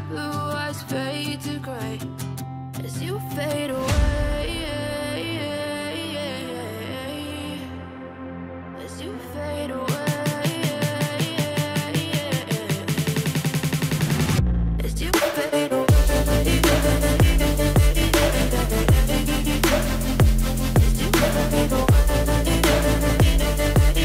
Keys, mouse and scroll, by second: 0.4 s, 1.6-9.7 drag, 9.7 right click, 11.8 click, 16.0 space.